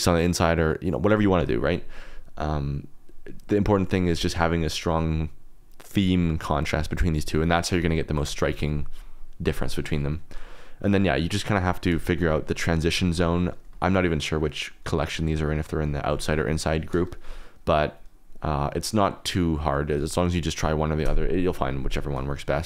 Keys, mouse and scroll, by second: 12.3 click, 12.7 KP_Decimal, 12.9 click, 13.8 shift+drag, 15.1 drag, 15.6 drag, 16.0 click, 18.6 click.